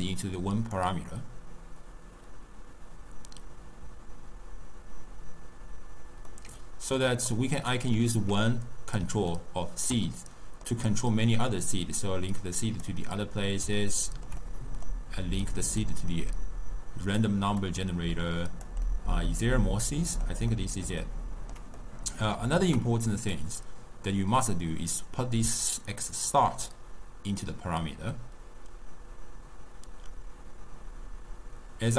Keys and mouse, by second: 6.4-7.4 middle drag, 7.4 drag, 9.4-11.7 ctrl+middle drag, 11.7 click, 14.0-15.9 ctrl+middle drag, 15.9-18.0 drag, 18.9-23.4 middle drag, 23.4 drag.